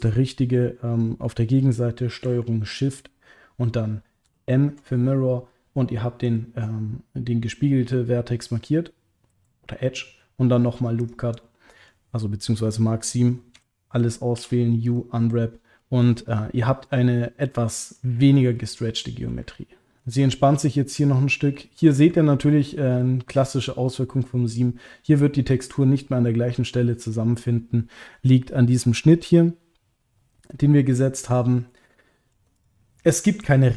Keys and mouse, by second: 4.2 ctrl+shift+m, 5.8 middle click, 11.4 middle click, 13.5 a, 14.3 u, 15.8 middle click, 16.2 click, 16.6 middle click, 17.9 ctrl+middle click, 18.5 middle click, 19.5 ctrl+middle click, 21.6 middle click, 22.1 ctrl+middle click, 23.0 middle click, 23.6 ctrl+middle click, 31.3 middle click, 32.0 ctrl+middle click, 32.5 click.